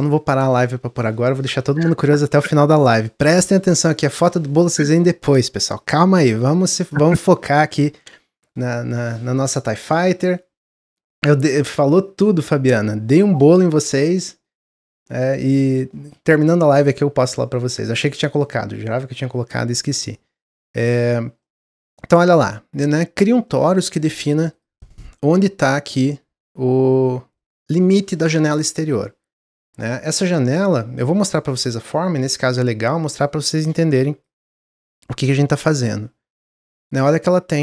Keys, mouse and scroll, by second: 11.4-15.4 middle drag, 15.4-15.8 scroll up 1, 15.8-16.2 shift+middle drag, 16.2-16.6 scroll down 2, 16.8 click, 17.2-17.9 middle drag, 17.9 scroll down 1, 18.4-19.0 middle drag, 19.0-19.9 scroll up 1, 19.9 scroll up 2, 20.0 click, 20.5-22.2 middle drag, 22.2 click, 23.4-24.0 middle drag, 24.0-24.5 scroll up 1, 24.5 click, 24.7-31.6 middle drag.